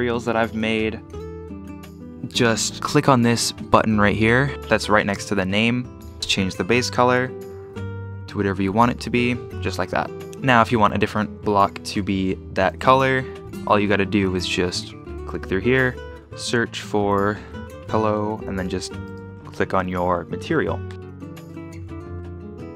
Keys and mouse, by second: 12.7 shift+d, 13.0 y, 15.2-19.8 drag, 17.5 l, 20.9-22.7 typing, 22.2 Delete.